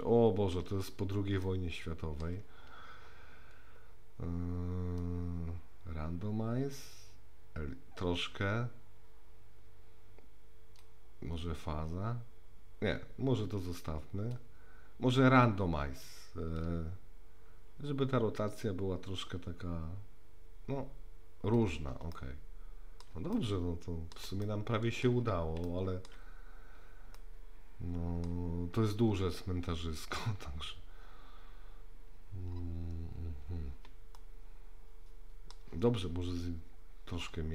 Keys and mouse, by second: 1.4-2.2 shift+middle drag, 5.0-10.8 drag, 11.4-14.4 drag, 16.7-21.6 drag, 22.2-23.0 shift+middle drag, 23.3-24.1 middle drag, 24.4-25.0 shift+middle drag, 25.7-26.1 shift+middle drag, 27.3 middle click, 34.2-35.5 shift+middle drag.